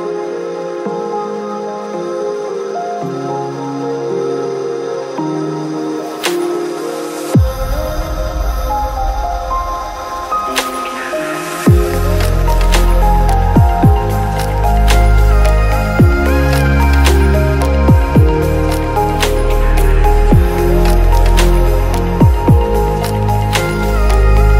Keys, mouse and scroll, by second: 1.0 click, 1.6 click, 2.7 ctrl+middle click, 3.4 click, 4.9 middle click, 5.1 click, 6.9 middle click, 7.6 click, 8.0 alt+shift+d, 8.0 click, 8.3 shift+s, 8.9 click, 9.9 KP_Decimal, 10.1 click, 10.5 KP_Decimal, 12.3 click, 12.8 shift+middle click, 13.2 shift+middle click, 13.5 middle click, 13.5 shift+KP_0, 13.7 middle click, 13.8 middle click, 14.7 shift+middle click, 15.0 click, 16.0 shift+s, 16.2 middle click, 16.4 click, 17.4 middle click, 17.6 click, 17.8 click, 18.4 click, 19.2 r, 19.6 click, 20.2 shift+s, 20.4 click, 21.8 shift+s, 22.2 click, 23.3 z, 23.5 shift+d, 23.7 shift+s, 24.3 click.